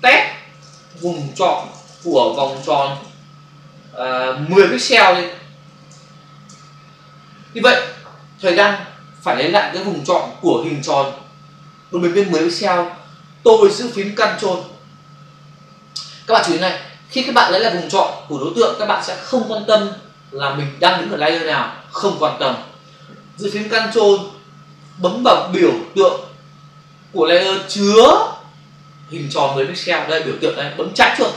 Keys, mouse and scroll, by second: 0.4-3.0 typing, 4.5 1, 6.3 Return.